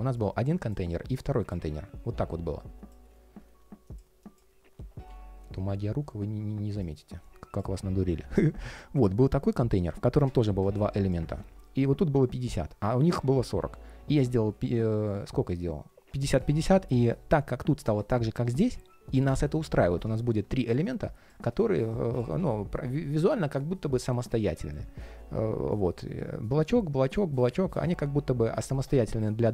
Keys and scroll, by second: 11.0 super+z, 22.1 super+d.